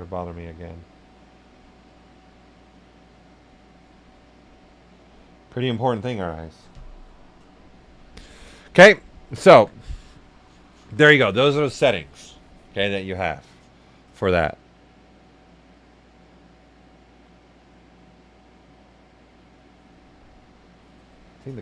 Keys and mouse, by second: 7.7 right click.